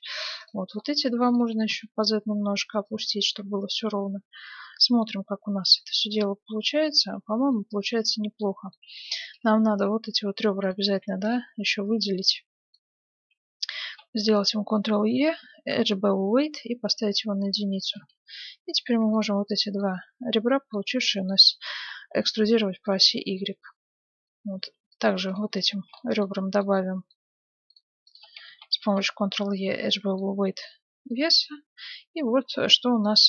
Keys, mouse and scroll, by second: 0.4-2.8 right drag, 1.6 g, 3.0-5.8 middle drag, 3.4 Tab, 6.9 Tab, 7.5-10.2 middle drag, 9.0 ctrl+Tab, 10.6-14.4 right drag, 13.8 ctrl+e, 14.5 right click, 18.0 ctrl+Tab, 18.6-20.8 right drag, 19.4-21.5 middle drag, 20.6 click, 21.8 e, 23.3 Tab, 24.5 ctrl+Tab, 25.2-27.3 right drag, 25.9-28.3 middle drag, 27.7-29.8 right drag, 28.5 ctrl+e, 30.1-33.2 middle drag, 30.7 Tab.